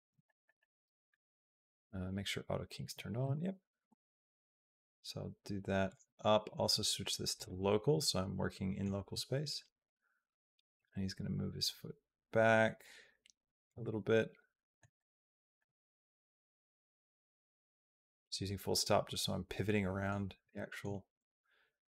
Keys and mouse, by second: 0.0 shift+middle click, 0.4 middle click, 3.7 g, 6.5 click, 8.2 middle click, 9.6 click, 10.6-13.5 drag, 13.6-14.6 middle drag, 14.8 shift+middle click, 17.4 KP_Decimal, 18.0-19.9 middle drag, 20.3 shift+middle click.